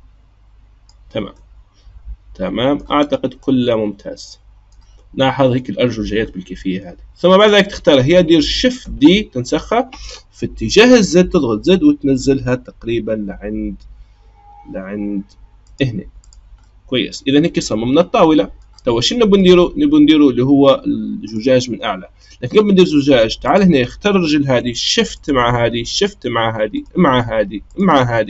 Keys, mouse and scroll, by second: 1.4-3.0 middle drag, 3.0-3.4 scroll down 1, 3.4-6.2 middle drag, 6.2-6.7 scroll down 2, 6.7-7.3 scroll up 3, 7.3 click, 8.8 shift+d, 16.2 click, 16.6-21.2 middle drag, 21.2 click, 22.6-23.4 middle drag, 23.4 click, 25.1 shift+click, 25.9 shift+click, 26.7 shift+click, 27.6 shift+click.